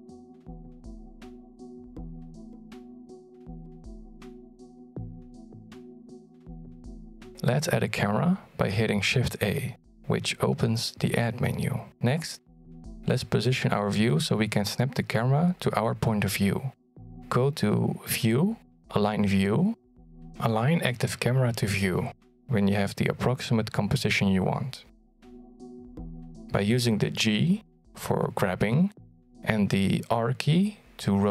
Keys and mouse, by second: 0.0 click, 2.5 shift+middle click, 2.9 middle click, 5.8 click, 6.8 middle click, 7.7 shift+c, 9.3 shift+middle drag, 10.1 shift+middle drag, 10.8 shift+a, 20.9-25.7 drag, 27.4 g.